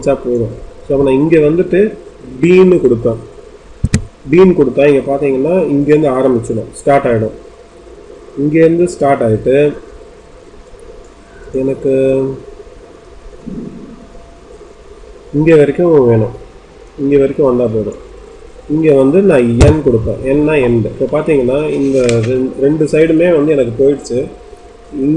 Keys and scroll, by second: 3.7 b, 19.5 n, 20.3 n.